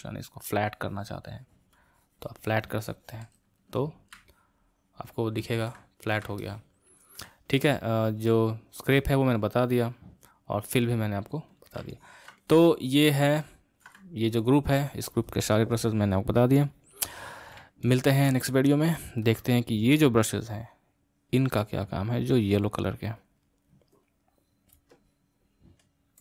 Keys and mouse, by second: 3.3 space, 4.3-8.1 middle drag, 8.1-11.8 drag, 11.9-16.4 ctrl+middle drag, 17.9-21.0 ctrl+middle drag, 21.0-24.0 drag.